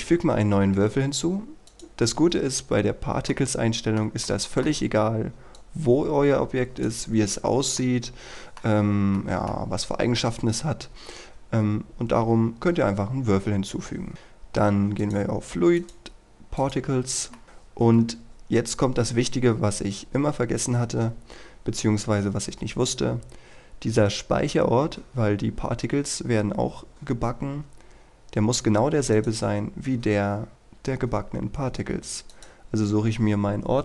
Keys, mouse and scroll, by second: 1.7 click, 2.3-3.3 scroll down 1, 3.3 middle click, 5.6-6.9 drag, 7.9 middle click, 10.9-11.3 scroll up 1, 11.3-13.1 scroll down 1, 13.1-14.1 scroll up 1, 14.1-15.1 scroll down 1, 15.1 click, 17.4 shift+middle click, 29.2 click.